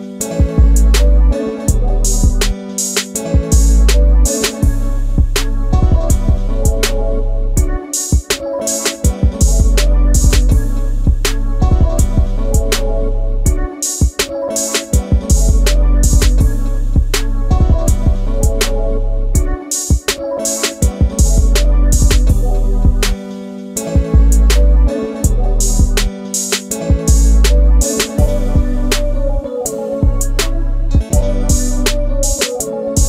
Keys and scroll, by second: 2.4 shift+space, 5.6 ctrl+c, 7.2 ctrl+v, 11.4 q, 15.5 m, 24.1 Up, 24.9 Left, 25.3 Right, 28.5 space.